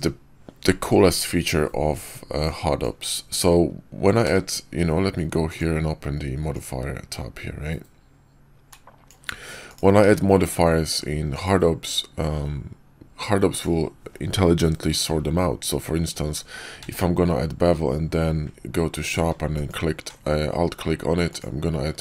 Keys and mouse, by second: 2.3 click, 4.1 q, 5.3 click, 8.7 click, 9.9 q, 16.7 q, 21.2 click.